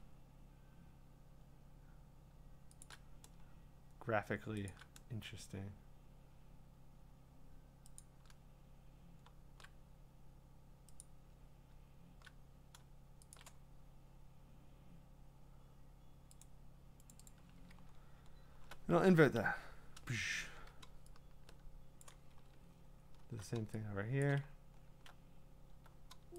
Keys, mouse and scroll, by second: 2.8 shift+click, 4.7 shift+click, 8.8 click, 11.0 click, 13.3 shift+click, 16.4 click, 17.1 click, 17.3 click, 17.8-18.6 scroll, 19.4 ctrl+i, 19.4-20.1 scroll down 10, 20.4 ctrl+d, 22.0 click, 22.0-23.2 scroll, 24.2 click, 24.5-25.0 scroll.